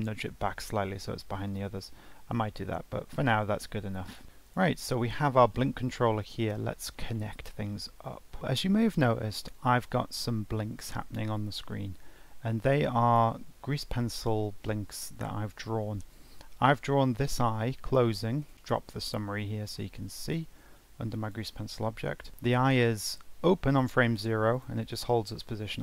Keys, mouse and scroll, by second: 1.6 g, 3.1 scroll down 1, 3.4-3.7 scroll up 1, 3.7-4.2 scroll down 1, 4.2 ctrl+s, 4.4 click, 5.0 g, 6.8 scroll up 2, 7.1 shift+middle click, 7.4-7.8 scroll down 3, 7.8 scroll up 1, 8.0 shift+middle click, 9.5-12.6 drag, 14.1 click, 17.6-18.5 drag, 19.4-22.4 drag, 23.7-25.8 drag.